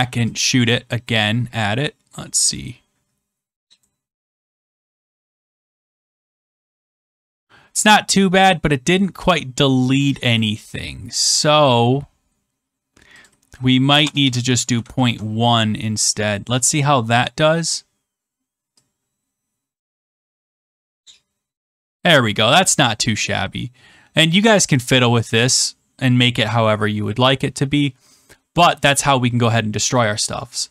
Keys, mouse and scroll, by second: 3.7 click, 10.1 click, 11.2 middle click, 13.2 click, 14.0-14.7 BackSpace, 14.9 ctrl+s, 16.3 click, 19.7 click, 24.2 click.